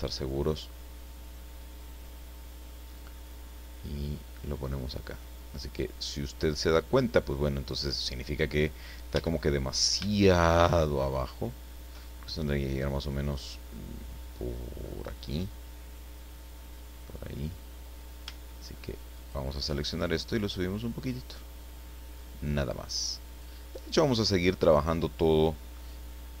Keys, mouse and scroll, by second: 1.8-3.4 drag, 4.2-6.9 drag, 7.3 scroll up 1, 8.0-8.3 scroll down 1, 9.1 a, 9.7-10.0 scroll up 1, 10.0-12.0 shift+middle drag, 19.1 alt+shift+right click, 20.1-23.6 shift+drag, 23.9-24.2 scroll down 1.